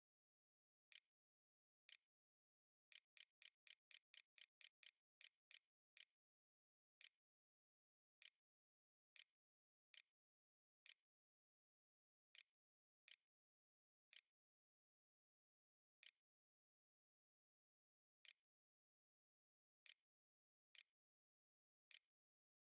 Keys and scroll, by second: 0.0-1.2 typing, 1.3 Delete, 2.7 Delete, 3.2 Delete, 3.5 Delete, 3.7 Delete, 3.9 Delete, 4.2 Delete, 4.4 Delete, 4.6 Delete, 5.0 Delete, 5.3 Delete, 6.5 End, 7.1-10.6 typing, 13.1-16.1 typing, 17.2 e, 18.0 Tab, 18.3-19.7 typing, 20.0 Insert, 20.2 Return, 20.8-22.6 typing.